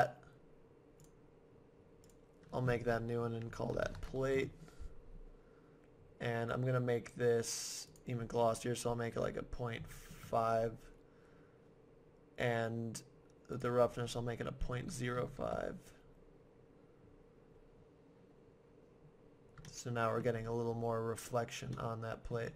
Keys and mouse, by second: 1.0-4.0 drag, 7.9-9.8 drag, 13.6-15.3 drag, 19.7-22.3 middle drag.